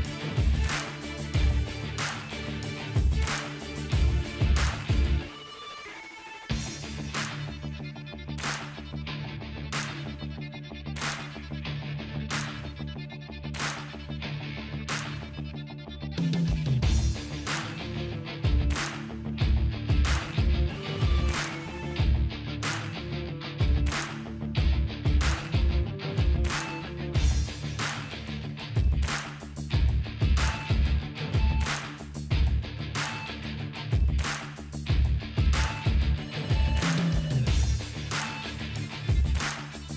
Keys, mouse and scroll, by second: 3.3 scroll down 1, 4.3 scroll down 1, 4.9-5.5 scroll down 1, 9.1 scroll up 1, 14.5-15.5 scroll up 1, 15.8 click, 18.0-19.5 drag, 25.7-29.4 drag, 37.3 ctrl+z, 38.1-38.7 ctrl+scroll down 1.